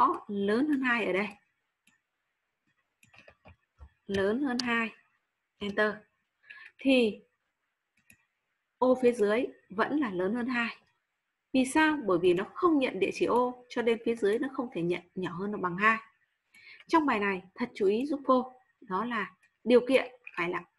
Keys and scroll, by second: 4.3-5.1 typing, 5.5 Return, 6.2 typing.